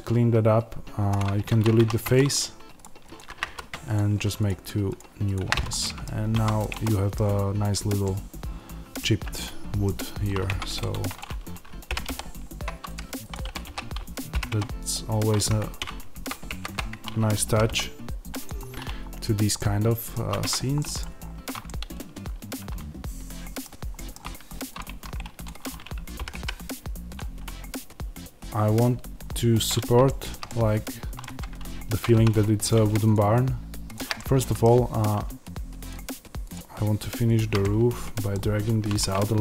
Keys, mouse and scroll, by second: 1.1 x, 1.7 1, 2.0 click, 3.3 f, 3.8 click, 5.4 f, 5.6 middle click, 5.9-6.2 scroll down 1, 6.2 Tab, 6.5 click, 6.7-10.6 middle drag, 7.0-7.9 scroll down 1, 9.8-10.1 scroll down 1, 10.1 scroll up 1, 10.4 Tab, 10.6-11.8 drag, 11.8 g, 12.8 click, 13.3 y, 15.5 Escape, 16.0 ctrl+z, 17.4 g, 18.3 click, 18.5-19.4 scroll down 1, 19.4-24.7 middle drag, 20.3 Tab, 21.1-21.6 scroll up 1, 24.7 click, 24.8 Tab, 25.3 click, 26.0 g, 27.0 click, 27.7-32.6 middle drag, 28.7-29.1 scroll down 1, 29.1-30.0 scroll up 1, 31.2 Tab, 32.0 3, 32.6 click, 34.1-35.8 middle drag, 34.9-35.5 scroll down 1, 35.8 shift+click, 37.5-39.4 middle drag.